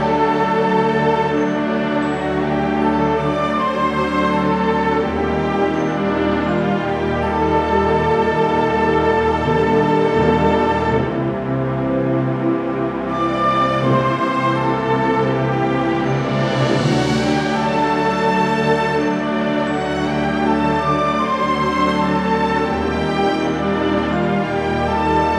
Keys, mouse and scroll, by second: 0.2 r, 0.6 middle click, 1.1 r, 1.5 middle click, 1.7 click, 2.5 middle click, 2.8 click, 3.8 click, 3.8 middle click, 4.2 r, 4.6 click, 4.9 scroll down 2, 5.0 alt+a, 5.1 scroll up 3, 5.3 shift+middle click, 5.6 click, 5.8 click, 6.6 alt+a, 7.5-8.3 scroll down 11, 8.1 scroll up 1, 8.4 scroll down 1, 8.5 shift+middle click, 8.5 scroll down 1, 8.7 click, 9.1 KP_Decimal, 9.3 middle click, 9.5 scroll down 8, 9.6 shift+middle click, 9.7 scroll up 4, 9.9 middle click, 10.0-10.3 scroll down 3, 10.1 middle click, 10.3 scroll up 2, 10.6 shift+click, 10.9 shift+click, 10.9 x, 11.0-12.3 scroll down 6, 11.2 middle click, 11.4 shift+middle click, 11.6 middle click, 12.2 click, 12.3-12.9 scroll up 5, 12.6 s, 12.9 click, 13.4 alt+g, 13.5 scroll down 2, 13.6 shift+middle click, 14.0 click, 14.0 scroll up 1, 14.6 click, 15.9 KP_Decimal, 16.1 middle click, 16.5 r, 18.2 click, 18.7-19.3 scroll up 2, 18.8 middle click, 19.3 click, 19.7 scroll down 4, 19.8 middle click, 19.9 scroll up 3, 20.1 click, 20.2-20.6 scroll down 1, 20.8 h, 20.9-21.5 scroll up 5, 21.2 click, 21.8 click, 22.5 alt+a, 22.5-23.0 scroll down 4, 22.7 middle click, 23.0 shift+middle click, 23.1 scroll up 2, 23.1 middle click, 23.7 scroll down 1, 24.0 click, 24.5 alt+d, 25.0 KP_Decimal, 25.2 middle click, 25.3 shift+middle click.